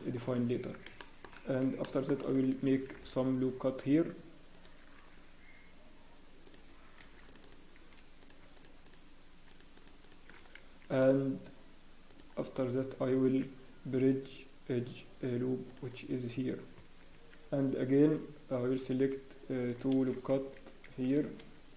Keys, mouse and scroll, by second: 0.5 Tab, 1.0 shift+middle click, 1.2 scroll up 2, 1.8 shift+middle click, 8.2 click, 8.5-10.2 shift+click, 10.2 click, 12.1 click, 12.6 right click, 16.6 scroll up 1, 16.8 Tab, 17.1 Tab, 17.5 scroll, 18.7 click, 18.7-19.0 scroll down 1, 19.6 right click, 20.8 Escape, 21.1 click.